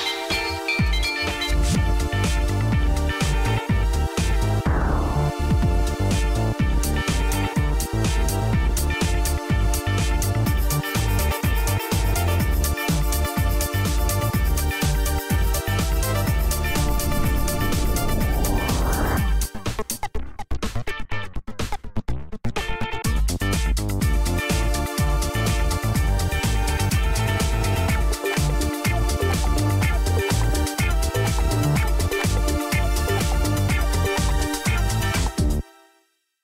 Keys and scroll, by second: 0.0-1.1 scroll up 1, 1.1 Up, 2.5 Return, 4.3 Return, 4.5 Return, 9.2-13.0 typing, 13.0 Return, 15.1-18.1 typing, 18.2 Return, 20.8-22.2 typing, 22.4 Up, 22.8 Up, 23.1 Up, 23.5 Up, 24.8 Return, 28.2 Return, 28.4 Return, 35.8-36.4 typing.